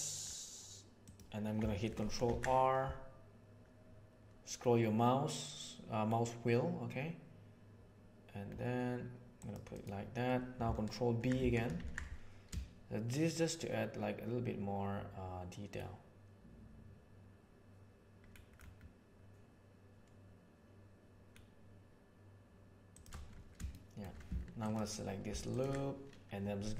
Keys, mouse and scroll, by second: 2.1 ctrl+r, 11.7 ctrl+b, 23.7 shift+middle click, 24.6 alt+right click.